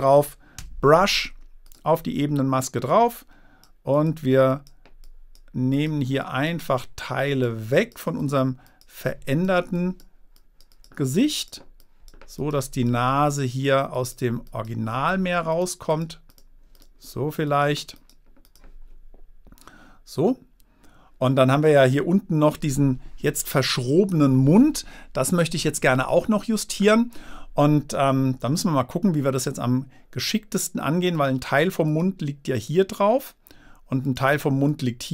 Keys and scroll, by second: 1.0 b.